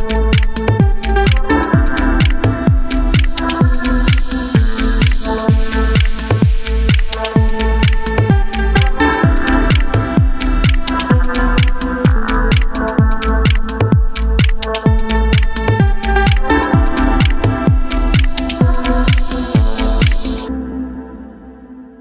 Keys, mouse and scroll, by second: 0.1 alt+click, 0.2 middle drag, 0.5 middle click, 0.7 alt+shift+click, 0.8 middle click, 1.1-1.4 middle drag, 1.4 scroll up 1, 1.5 alt+shift+click, 1.6 middle drag, 1.9 alt+shift+click, 1.9 middle click, 2.1 ctrl+z, 2.2 alt+shift+click, 2.2-2.6 middle drag, 2.6 ctrl+e, 2.8 scroll down 1, 2.9 middle click, 3.1 middle drag, 3.4 alt+shift+drag, 3.5 ctrl+e, 3.7 middle drag, 3.9 a, 3.9-4.8 shift+middle drag, 4.8 drag, 4.9 middle click, 5.1 g, 5.4 middle drag, 5.6 click, 5.7 middle drag, 5.9 middle click, 6.1 g, 6.7 drag, 6.9 middle click, 7.0 g, 7.3 middle drag, 7.6 middle drag, 7.8 click, 8.0 g, 8.3 middle drag, 8.6 drag, 8.9 middle click, 9.0 g, 9.4 middle drag, 9.6 shift+drag, 9.7 middle click, 9.9 g, 10.1 middle click, 10.3 g, 10.5 Tab, 10.5-11.2 middle drag, 11.2 scroll up 2, 11.2 shift+middle click, 11.6-14.8 typing, 11.7 middle click, 11.8 drag, 11.9 middle click, 12.6 shift+middle drag, 13.5 middle click, 13.9 Tab, 13.9-14.3 middle drag, 14.3 Tab, 14.6 click, 14.9 Tab, 14.9-15.7 middle drag, 15.7 scroll down 2, 15.8-16.2 scroll up 2, 15.9 middle drag, 16.2 middle click, 16.4 KP_Decimal, 16.5 KP_3, 16.6 scroll up 3, 16.6 shift+middle click, 16.8 Tab, 16.9 shift+middle click, 17.2 click, 17.3 middle click, 17.5-19.0 typing, 18.0 shift+middle click, 18.0 scroll up 2, 18.3 click, 18.6 click, 19.2 scroll down 2, 19.3 shift+middle drag, 19.5 scroll up 3, 19.8 click, 20.0 scroll down 1, 20.1 shift+middle click, 20.4 alt+shift+click, 20.7 alt+shift+click, 20.9 shift+middle click, 21.0 scroll up 1, 21.2 alt+shift+click, 21.5 shift+middle drag, 21.5 b.